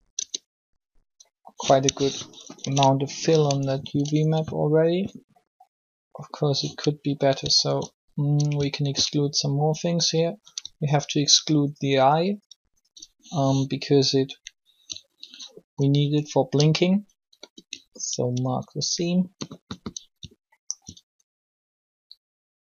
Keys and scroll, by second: 0.1 Tab, 2.3 ctrl+l, 17.2 ctrl+e.